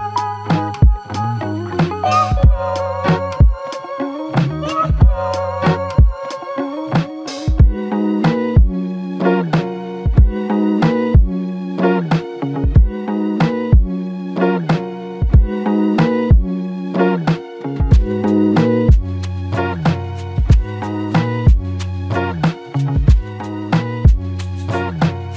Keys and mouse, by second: 0.1 double click, 6.0 typing, 7.1 double click, 14.1 alt+shift+click, 17.8 shift+click, 19.8 double click, 25.0 alt+click.